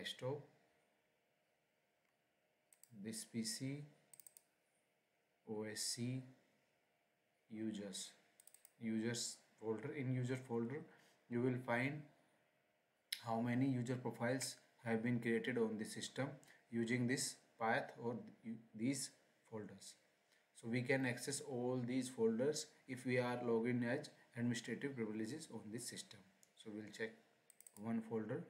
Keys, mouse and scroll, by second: 1.9-2.7 scroll, 2.7 click, 4.3 click, 7.3-8.3 scroll, 8.3 click, 27.4 click.